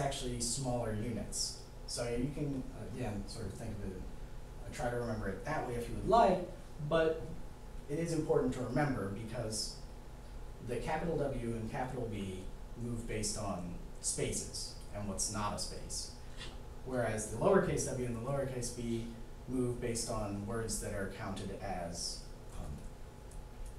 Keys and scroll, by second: 0.3 b.